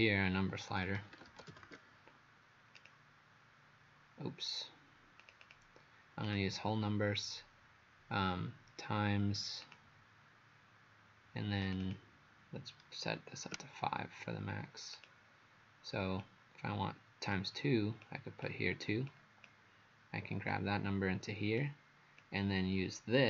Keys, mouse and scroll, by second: 0.8-2.2 typing, 2.8 click, 5.4 click, 6.3 click, 11.8 click, 13.6 KP_5, 15.0 click.